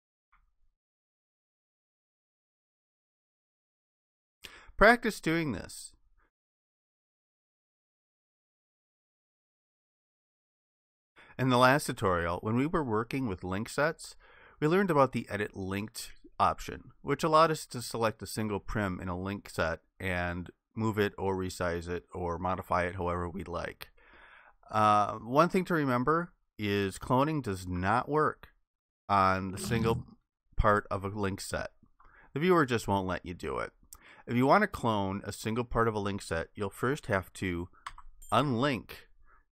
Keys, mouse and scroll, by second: 0.9 alt+click, 29.3 shift+click, 37.9 ctrl+shift+i.